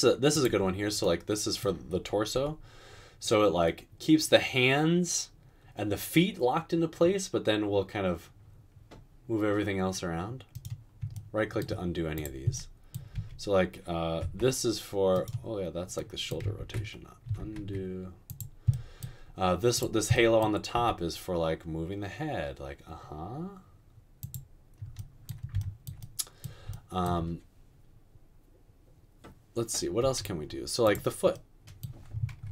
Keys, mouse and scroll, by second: 2.4 g, 13.2-14.2 typing, 16.6 ctrl+z, 17.6 ctrl+z, 20.9 r.